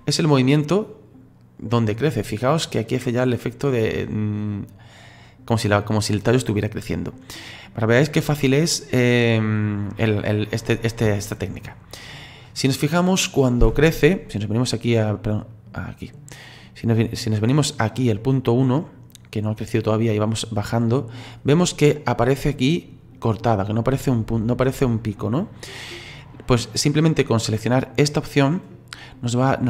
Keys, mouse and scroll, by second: 0.0-11.1 drag, 11.1 shift+middle click, 11.7-12.2 scroll up 5, 12.2-13.7 scroll down 1, 13.7 click, 14.4-28.8 drag.